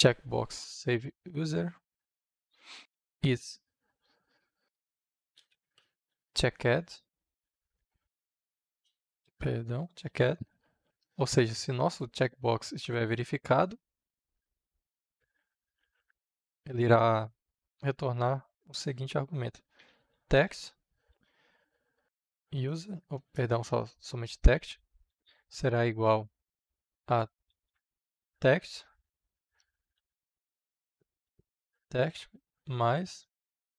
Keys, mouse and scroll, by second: 0.9 Return, 2.3-7.4 typing, 8.8 Return, 9.2 e, 10.0 d, 10.5 shift+9, 10.8-15.2 drag, 15.7 shift+/, 16.0 Return, 19.5-20.9 typing, 22.6 Return, 23.1 Return, 24.2 space, 24.8 space, 26.9-28.1 typing, 29.4 Return, 29.7 space, 30.0 Return, 31.2 space, 32.6 space.